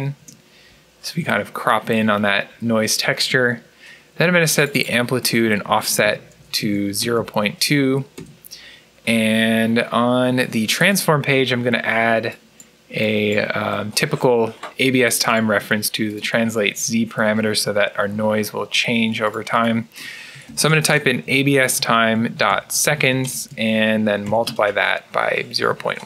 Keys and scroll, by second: 0.0 Return, 5.5-7.6 typing, 8.0 Return, 9.9-10.6 typing, 20.0-23.2 typing, 24.9-26.0 typing.